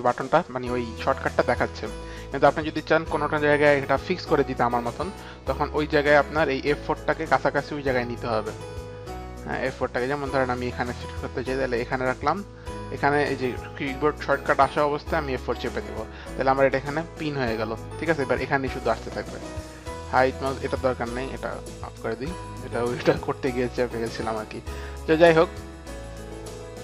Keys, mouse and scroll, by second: 2.6 click, 6.0 click, 9.8 click, 10.2 click, 11.7 click, 13.1 click, 17.0 click, 22.4 click.